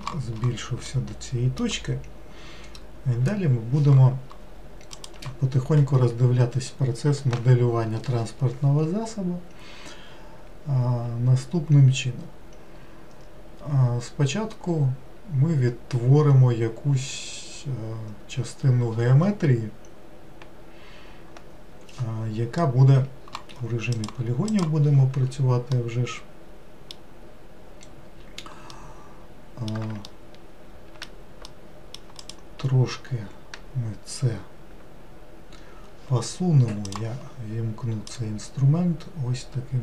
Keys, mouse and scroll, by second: 0.9-4.0 middle drag, 23.9 click, 24.5-25.7 drag, 25.7-32.2 middle drag, 32.2 click, 36.8-38.3 drag.